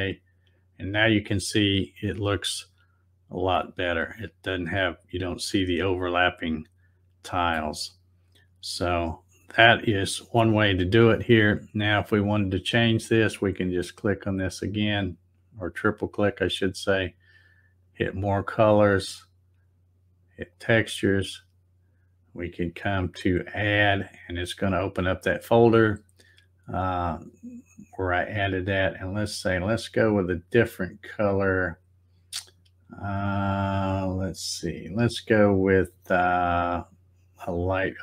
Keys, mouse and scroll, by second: 0.4 click, 2.7 middle click, 3.5-7.5 middle drag, 8.1 middle click, 8.7-9.1 scroll down 3, 13.4 click, 13.6 click, 13.8 click, 15.4 click, 17.9 click, 20.5 click, 23.5 click, 29.6-30.6 middle drag, 33.8-35.0 middle drag, 37.4 click.